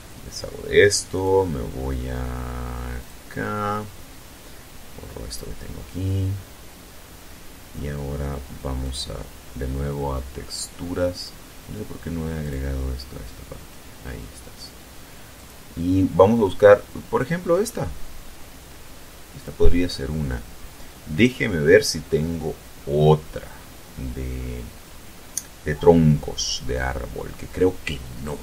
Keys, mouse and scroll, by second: 0.8 click, 2.7 click, 5.0 click, 6.0-6.4 scroll up 2, 6.6 scroll down 2, 8.5 click, 10.8 click, 12.1 click, 15.0 click, 19.1 click, 19.7-21.0 scroll down 4, 21.9-22.8 scroll down 3, 23.7-25.2 scroll down 4, 25.9-27.9 scroll down 7, 28.0-28.4 scroll down 2.